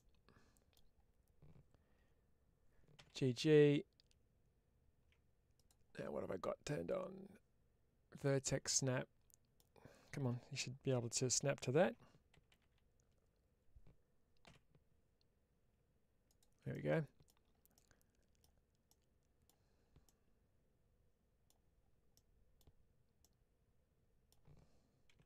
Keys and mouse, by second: 5.4 click, 6.7-8.4 drag, 8.6 middle click, 16.2 ctrl+click, 16.6 middle click, 17.6 middle click, 18.7 middle click, 19.9-21.3 middle drag, 22.0 middle click, 23.1-24.1 middle drag, 25.0 1.